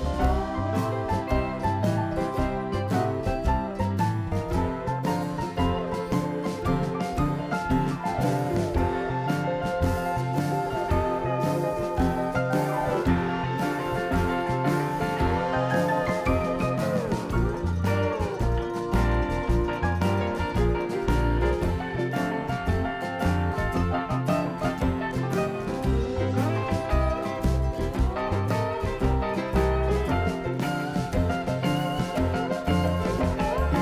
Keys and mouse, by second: 1.1 s, 2.9 middle click, 3.7 KP_7, 4.6 KP_3, 11.1 KP_3, 11.9 z, 13.0 a, 13.9 b, 16.3-17.5 drag, 16.8 b, 19.0 x, 21.0-22.8 typing, 23.2 ctrl+n, 26.2 a, 27.7-29.6 right drag, 28.6-29.6 drag, 33.7 e.